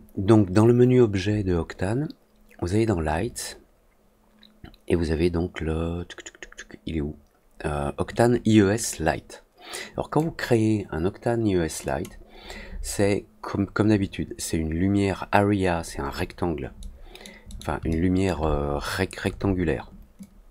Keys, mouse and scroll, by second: 11.8 click, 16.7 middle click, 17.4 middle click, 17.8 alt+middle click, 20.1-20.5 drag.